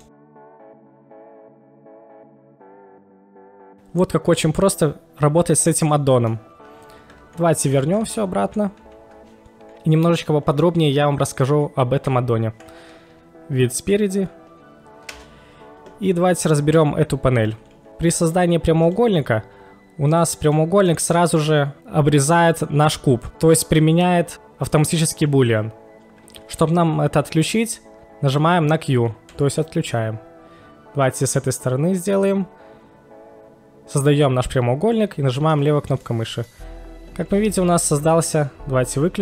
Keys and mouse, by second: 0.0-0.9 middle drag, 1.2-6.4 middle drag, 7.8 ctrl+z, 8.0 ctrl+z, 8.4 ctrl+z, 8.8 ctrl+z, 12.0 KP_1, 15.0 KP_1, 15.1 space, 18.8 click, 20.1 click, 20.5-20.9 middle drag, 23.3 KP_1, 29.3 q, 31.3 click, 31.3 q, 35.5 click, 36.1-36.5 middle drag, 37.6 click, 38.3 right click.